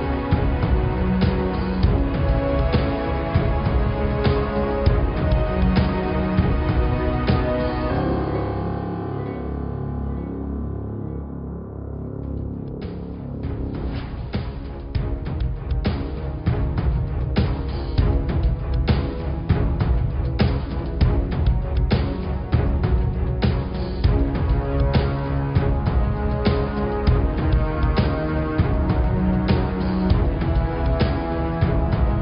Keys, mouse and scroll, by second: 4.6 r, 13.5 click, 14.5 ctrl+z, 14.8 ctrl+z, 15.7 s, 21.9 Tab, 22.1-23.2 scroll down 2, 23.2 click, 23.6 middle click, 24.0 scroll up 3, 24.2-25.9 middle drag, 25.9-26.3 scroll up 1, 26.3 middle click, 26.8 click, 27.6 shift+a, 30.6 s.